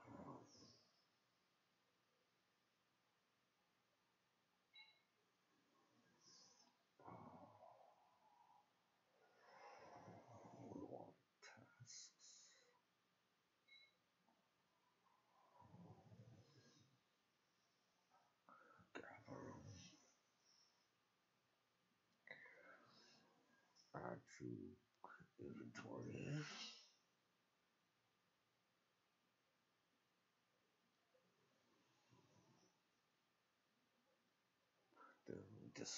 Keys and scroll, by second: 5.1 ctrl+z, 5.6 ctrl+c, 6.4 f, 29.4 =, 29.6 \, 30.7 Return, 31.1-32.1 typing, 33.4 ctrl+x, 33.4 ctrl+c, 34.1 ctrl+v, 34.4-35.1 typing.